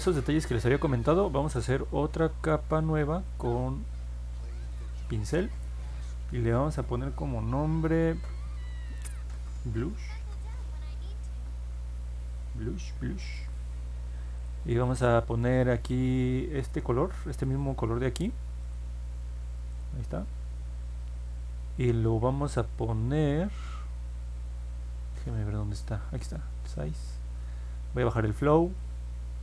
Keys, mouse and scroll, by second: 1.5 middle click, 3.2 click, 4.6 click, 4.7 click, 9.1 b, 9.7 u, 11.3 Return, 14.3 click, 18.6 click, 19.7 click, 26.7 click, 27.9 click.